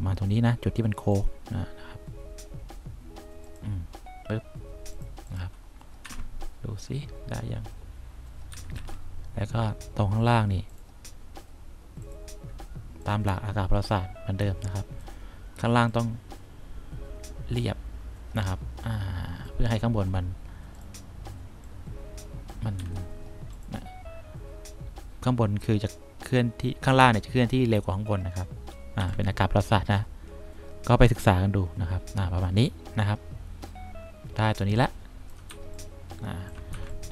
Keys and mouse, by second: 6.2 F1, 8.7 F2, 8.9 F3, 13.5 click, 14.7 click, 16.1-19.6 drag, 21.8 click, 22.9 F1, 29.1 3, 35.7 1, 36.9 3.